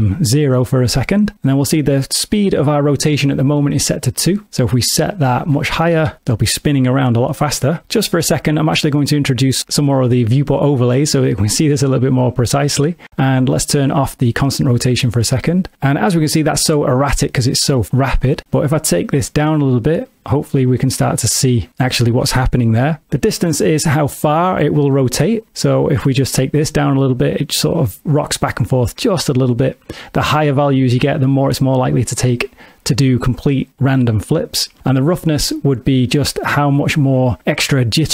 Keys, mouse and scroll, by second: 4.6 click, 9.9 click, 14.2 click, 18.1 click, 25.6 click, 30.2 click, 36.0 click.